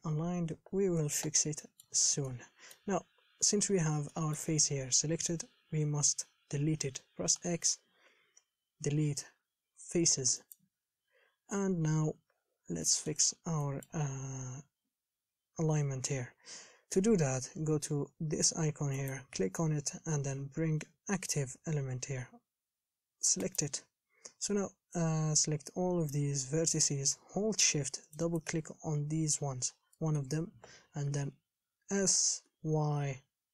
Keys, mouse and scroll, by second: 0.1-0.6 scroll down 9, 1.9 shift+middle click, 2.3 scroll up 2, 2.5-10.7 middle drag, 11.8-12.2 scroll down 3, 12.2 KP_7, 12.6 scroll up 4, 13.1 shift+middle click, 13.5-13.9 scroll up 1, 13.9-15.0 shift+middle drag, 15.0-23.8 scroll down 4, 26.3 click, 28.4 shift+click, 30.2-31.4 shift+middle drag, 31.4 s.